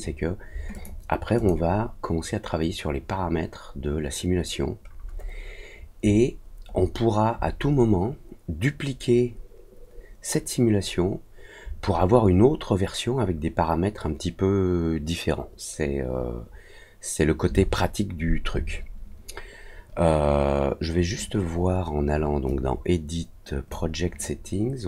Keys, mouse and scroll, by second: 0.7 click, 1.3 click, 3.7-4.3 scroll down 2, 4.6 scroll up 1, 4.8 scroll down 1, 5.0-5.3 scroll up 1, 6.0 scroll up 1, 6.3 middle click, 6.7 middle click, 22.4-23.6 drag.